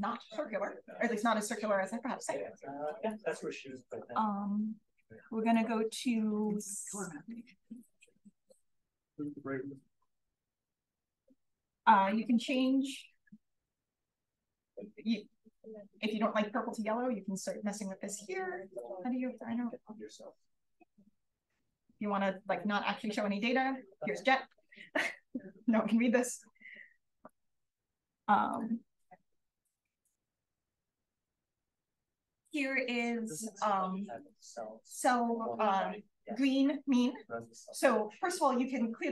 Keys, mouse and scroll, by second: 3.0-5.5 drag, 6.3 click, 7.3 click, 9.2 click, 11.4 click, 13.3 click, 15.3-16.3 drag, 17.3 click, 19.3-20.0 scroll up 1, 21.6 click, 27.2-28.6 drag, 29.5 click, 31.0 click.